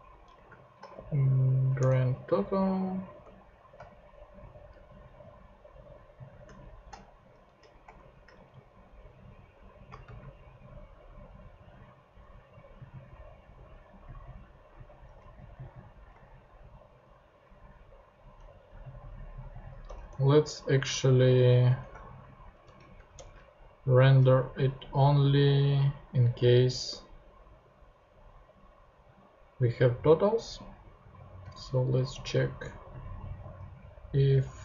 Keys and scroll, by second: 0.1 Right, 0.9 alt+shift+g, 1.8 Return, 6.6 shift+super+/, 7.2 alt+shift+/, 7.3 alt+shift+Left, 8.3 alt+shift+Right, 9.3 alt+shift+Left, 10.0 alt+shift+super+Left, 10.1 alt+shift+super+c, 10.8 shift+super+c, 15.2 super+v, 16.6 super+v, 19.8 BackSpace, 21.6 Return, 22.6 shift+[, 23.1 shift+Return, 24.0 Return, 24.3 Down, 24.7 Up, 32.4 super+c, 33.2 super+v.